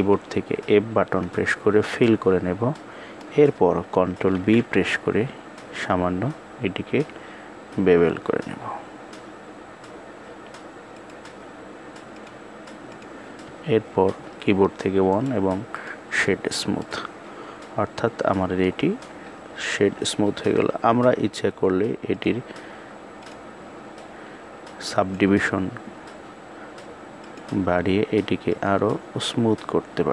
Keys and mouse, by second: 0.2 f, 2.4 middle click, 4.1 ctrl+b, 12.0 click, 14.0 KP_1, 14.9 right click, 16.4-18.3 middle drag, 21.8 click, 22.9-24.9 drag, 26.9 click, 28.1 click.